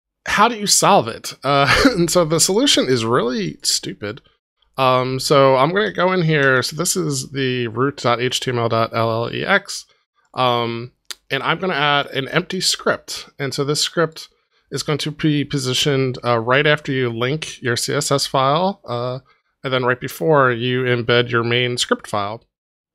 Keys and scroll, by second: 5.8 super+z.